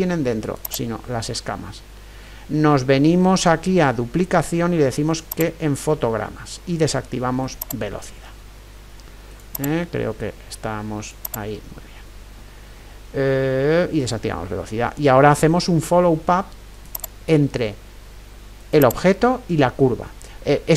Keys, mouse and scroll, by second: 0.7-2.6 right drag, 4.5-7.2 middle drag, 5.3-9.5 drag, 17.0-20.7 right drag.